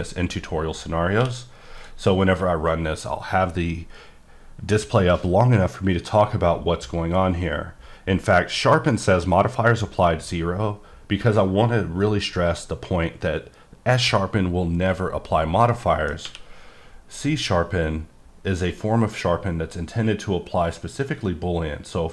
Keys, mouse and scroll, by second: 1.2 q, 1.8 click, 15.7 middle click, 16.2 q.